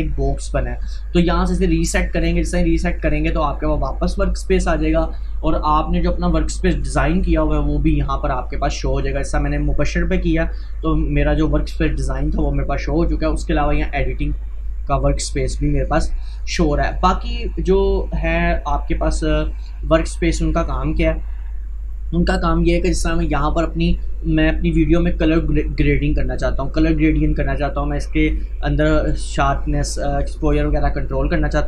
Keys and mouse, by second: 0.0-0.3 typing, 1.8 click, 6.8 click, 13.7 click, 21.8 click.